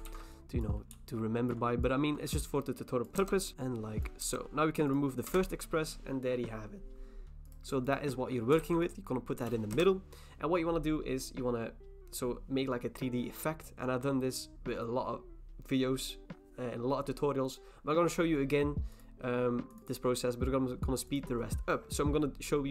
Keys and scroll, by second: 0.1 ctrl+t, 3.2 Return, 3.5 ctrl+t, 3.5 s, 4.2 Return, 5.3 BackSpace, 8.6 ctrl+t, 9.7 Return.